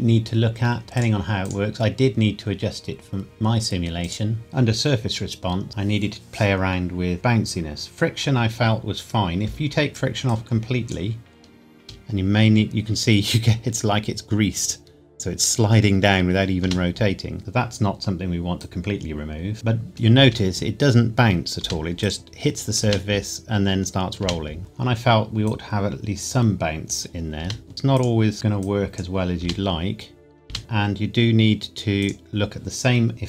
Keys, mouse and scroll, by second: 4.4 click, 10.2 click, 11.7 space, 16.6 space, 17.4 click, 20.1 space, 22.0 click, 22.8 space, 24.6 click, 27.3 space, 27.9 click, 29.4 space, 30.6 click.